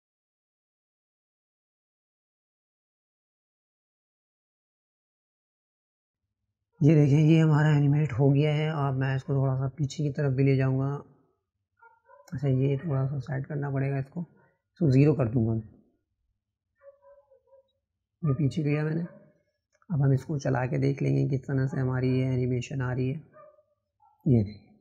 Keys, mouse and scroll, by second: 4.2 click, 8.7 click, 16.7 click.